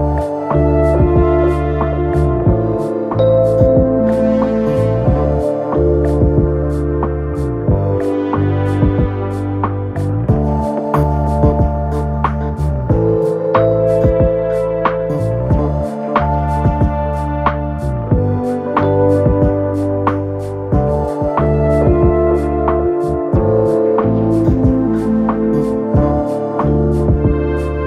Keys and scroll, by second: 7.6 3, 7.8 ], 8.6 4, 14.6 ctrl+d, 14.7 Escape, 15.9 ctrl+d, 16.0 Escape, 16.9 ctrl+d, 17.0 Escape, 17.8 ctrl+d, 17.9 Escape, 18.5 ctrl+d, 18.6 Escape, 21.6 ctrl+d, 21.7 Escape, 22.6 ctrl+d, 22.7 Escape.